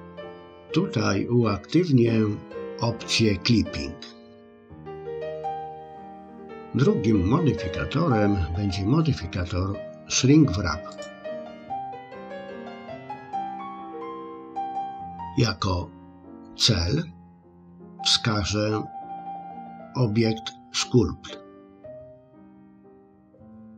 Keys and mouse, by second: 4.5 click, 10.9-12.9 drag.